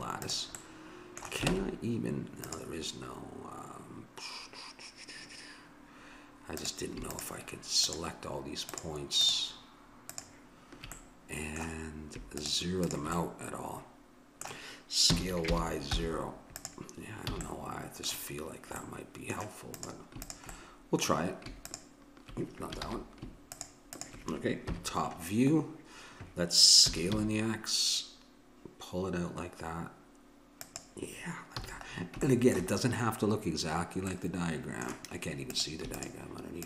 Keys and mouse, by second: 1.6 Tab, 6.5-11.6 drag, 11.0 middle click, 11.0 right click, 15.1 s, 17.3 a, 17.4-19.2 drag, 19.8-22.8 drag, 22.8 ctrl+z, 23.6 click, 24.7 KP_7, 26.9 s, 31.6 a, 32.5-33.7 middle drag, 35.5-36.6 drag.